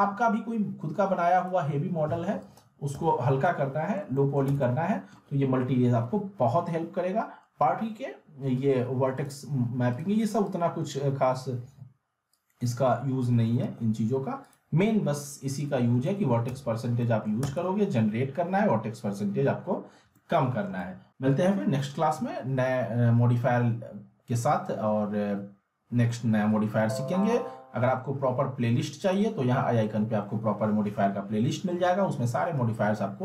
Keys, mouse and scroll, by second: 1.3 alt+middle click, 1.4 click, 2.9 z, 4.1 alt+middle click, 4.5 z, 4.6-5.2 middle drag, 9.2-13.2 drag, 13.7 ctrl+z, 14.4 click, 16.0 alt+middle click, 16.5 z, 17.0 alt+middle click, 17.4 z, 20.1-20.8 alt+middle click, 29.0 click.